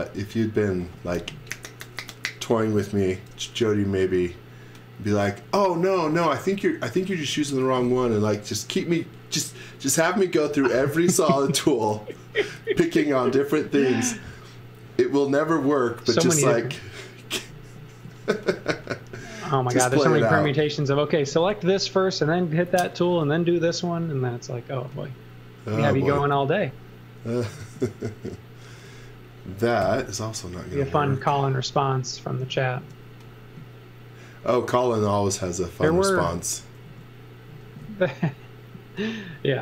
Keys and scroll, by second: 18.0 z, 18.5 x, 20.0 z, 20.3 x, 22.7 a, 28.6 space, 29.8 l, 36.8 a.